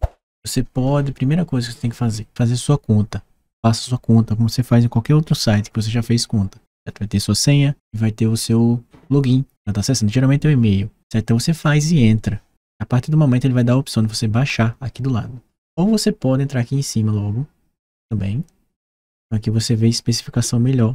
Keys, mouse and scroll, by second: 18.7 click.